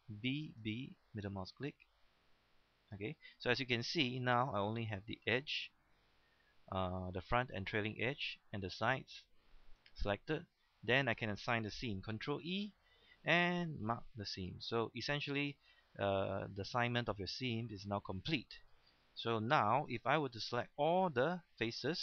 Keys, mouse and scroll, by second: 0.2-0.6 typing, 1.3 middle click, 2.8 right click, 3.2-11.1 middle drag, 12.3 ctrl+e, 13.8 click, 14.5 scroll down 1, 14.7 middle click, 15.3 scroll up 1, 15.6 middle click, 16.3-16.8 scroll up 1, 16.8-18.6 middle drag, 18.6-18.9 scroll down 1, 18.9 middle click, 21.3-21.6 shift+scroll down 1, 21.6 shift+middle click.